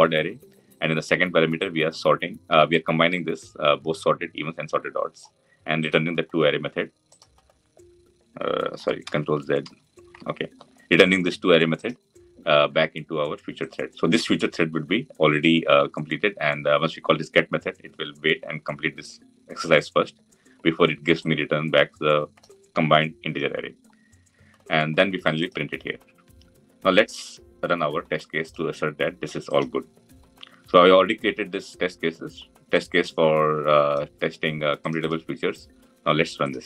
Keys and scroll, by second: 8.9 ctrl+z.